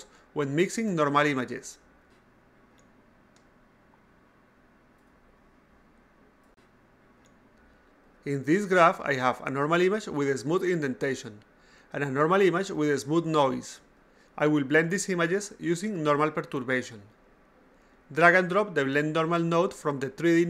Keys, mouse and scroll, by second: 1.3 click, 2.3 a, 3.3-5.2 drag, 5.7 a, 6.0 click, 7.2 click, 8.8 click, 8.9 click, 13.0 click, 13.2 click.